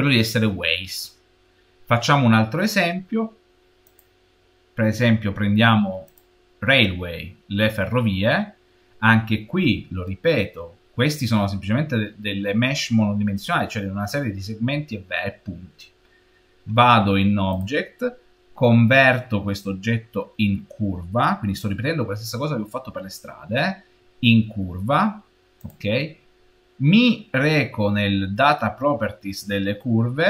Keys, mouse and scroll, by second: 3.7 click, 6.0 click, 8.2-11.2 scroll down 1, 11.2 shift+middle click, 11.9-14.2 shift+middle drag, 17.4-20.4 middle drag, 17.4 click, 27.0-27.7 scroll down 5, 29.6-30.0 scroll down 4.